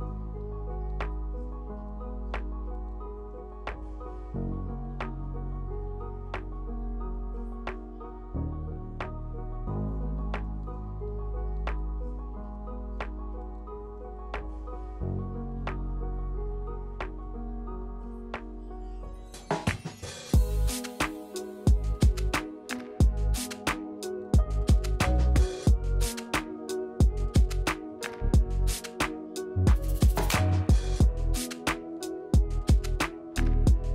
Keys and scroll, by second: 0.4 g, 2.8 g, 3.5 1, 3.5 ctrl+z, 4.2 ctrl+z, 7.7 1, 8.9 q, 19.9 w, 21.4 w, 22.2 space, 22.5 space, 25.2 Delete, 25.9 space.